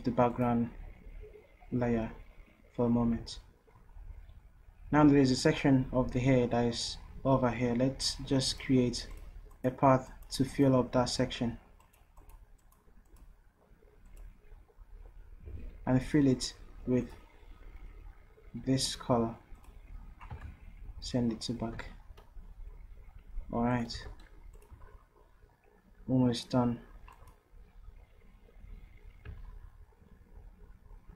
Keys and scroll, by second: 11.3 ctrl+z, 20.8 ctrl+shift+Down, 24.0 v.